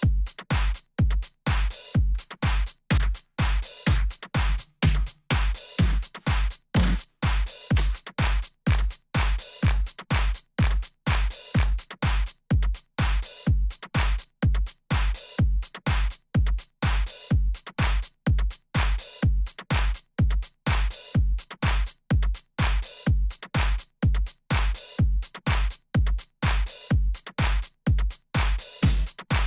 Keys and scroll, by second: 16.4 d, 22.7 Left, 23.8 Up, 29.2 Down.